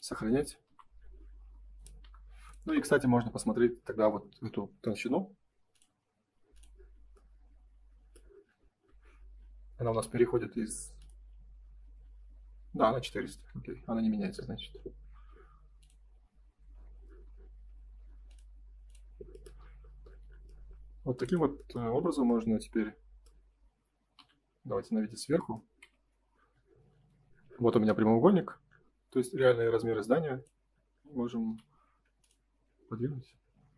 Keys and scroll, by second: 0.6 Delete, 2.0 Delete, 13.0 Escape, 13.4 space, 22.0 F3, 31.4 m.